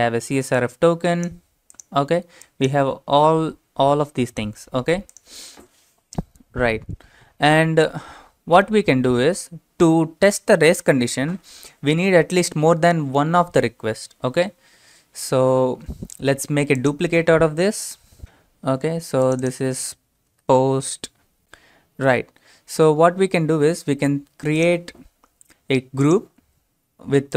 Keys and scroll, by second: 18.2 ctrl+r, 20.1-20.8 typing.